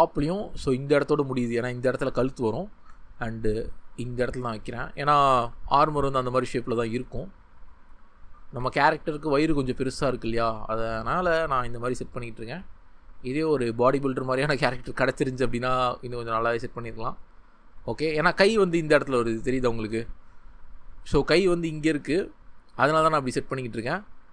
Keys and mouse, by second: 0.1 g, 1.8 click, 4.2-5.3 drag, 8.5 g, 9.9 click, 10.4 g, 11.1 click, 18.2 click, 20.5 click.